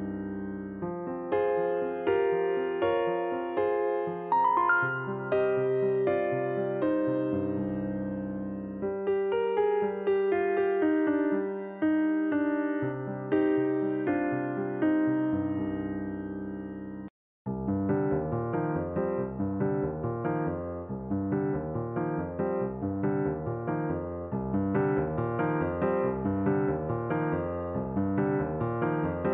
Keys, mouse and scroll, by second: 0.1 click, 1.4 click, 2.3 click, 4.3 click, 5.9 KP_Decimal, 6.8-7.2 scroll down 1, 7.2 Tab, 7.6-8.9 middle drag, 8.9 click, 10.3 e, 11.4 click, 13.4 e, 14.4 s, 17.6 middle click, 18.4 s, 19.8-20.9 middle drag, 20.9 click, 22.0 e, 22.6-22.9 scroll down 2, 22.9 shift+middle click, 23.8 click, 25.6-26.7 scroll down 1, 26.7 click, 27.8-28.3 scroll up 3, 28.3-29.3 shift+middle drag.